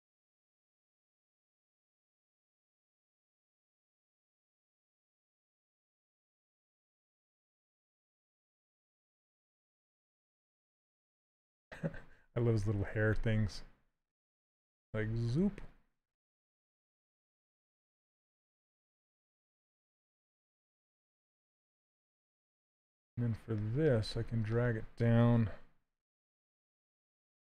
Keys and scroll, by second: 20.9 s, 25.4 shift+f.